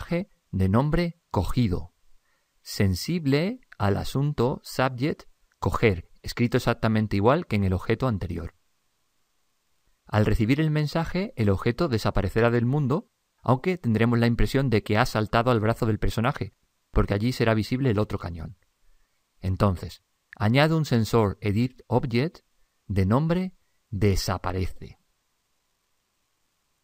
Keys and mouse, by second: 0.0 click, 0.8 click, 4.2 click, 13.8 click, 20.9 click, 23.3 click, 25.1 click.